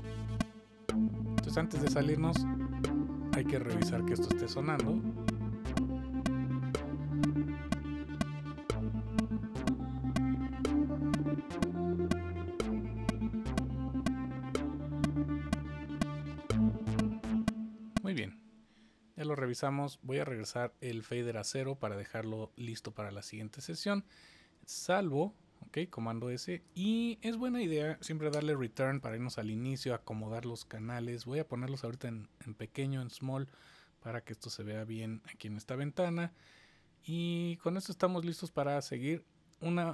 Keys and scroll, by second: 24.7 super+s, 25.9 super+s, 38.8 super+s.